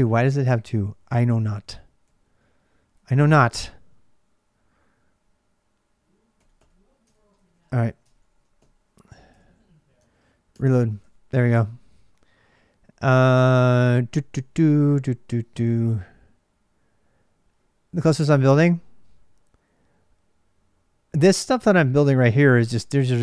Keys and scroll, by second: 0.5-2.9 typing, 5.9-8.3 typing, 7.8 ctrl+[, 9.1 alt+Tab, 10.3 ctrl+r.